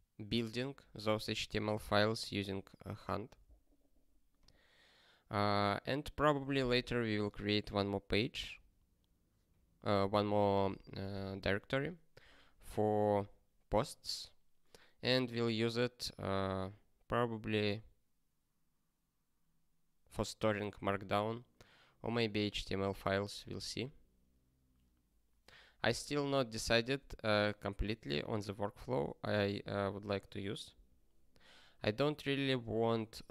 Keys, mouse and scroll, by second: 4.4 click.